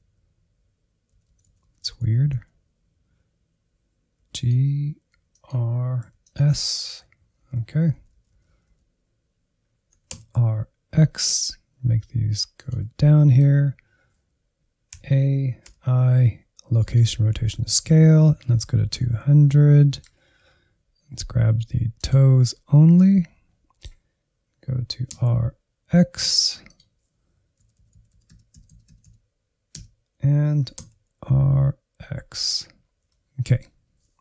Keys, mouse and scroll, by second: 1.7 Left, 1.9 Left, 2.1 Left, 2.4 Left, 4.1 g, 5.0 r, 5.9 s, 7.0 Right, 7.2 Right, 7.4 Right, 7.6 Right, 7.8 Right, 8.0 Right, 8.1 Right, 8.3 Right, 8.5 Right, 8.7 Right, 9.8 r, 13.1 shift+middle click, 13.5-15.0 scroll up 2, 15.0 a, 15.5 i, 17.7-18.5 Right, 18.7 Right, 18.9 Right, 19.1 Right, 19.3 Right, 19.7 middle click, 20.1-21.5 scroll up 5, 21.9 click, 22.4-25.0 middle drag, 25.0 r, 27.7-28.0 Right, 28.2-28.9 Right, 29.1 Right, 29.8 Right, 30.5 r, 32.7-33.0 scroll down 1, 33.0-34.2 middle drag.